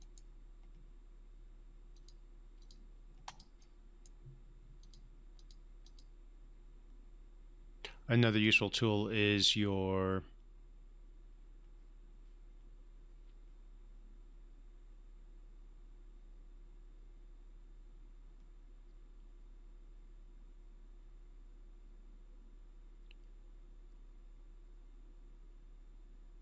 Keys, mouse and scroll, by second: 0.0 right click, 1.9 click, 3.6-4.2 right click, 4.8 click, 8.2 click.